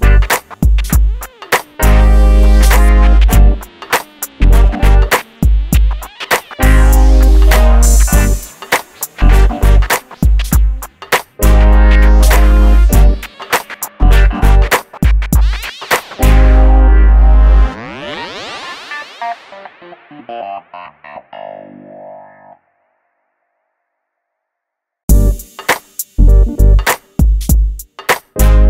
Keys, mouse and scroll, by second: 2.5 middle click, 3.0 click, 5.2 middle click, 5.9 click, 8.1 scroll down 1, 8.7 shift+middle click, 9.2-9.6 scroll up 1, 10.2 click, 11.0-13.5 scroll up 1, 13.5-14.2 scroll down 1, 14.2 middle click, 15.2-15.6 scroll up 1, 16.5-16.9 scroll down 1, 17.7-18.8 scroll up 1, 18.8 l, 19.4 click, 20.9 scroll down 1, 21.4 shift+middle click, 22.3 click, 24.8-25.2 scroll down 1, 25.2 g, 25.6 shift+middle click, 26.1 scroll up 1, 26.7 shift+middle click, 28.0 l.